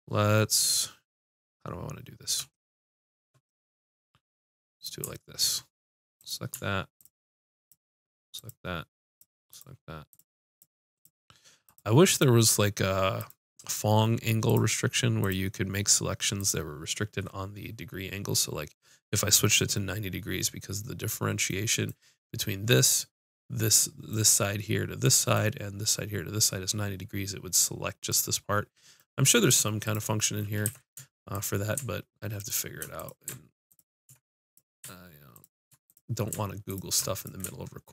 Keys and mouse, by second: 1.1-2.5 middle drag, 4.7-18.2 drag, 23.8 middle click, 25.1-26.7 middle drag, 28.1 middle click, 29.8-34.7 drag, 30.6 ctrl+z.